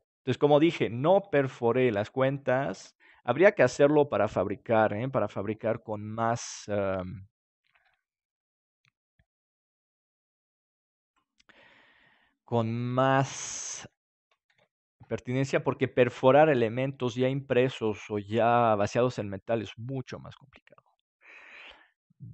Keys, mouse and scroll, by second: 0.3-1.9 middle drag, 1.9 click, 2.7 ctrl+s, 5.5 KP_7, 8.3 click, 8.7 right click, 9.6-11.7 drag, 11.7-14.5 middle drag, 14.5 ctrl+s, 20.7-22.3 middle drag.